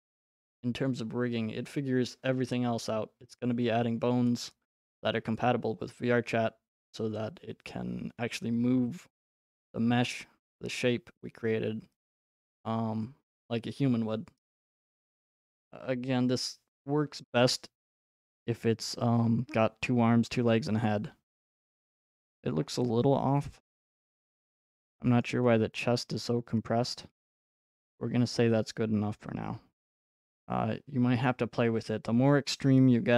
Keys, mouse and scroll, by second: 24.3 right click, 25.2 right click, 30.2 click, 31.4-32.3 drag.